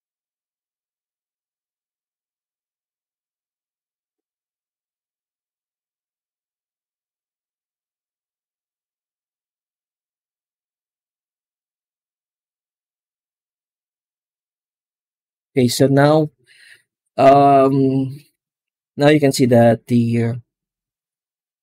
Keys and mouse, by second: 1.1 ctrl+shift+click, 8.4-9.6 middle drag, 12.7-13.4 middle drag, 14.1 z, 15.6 ctrl+s.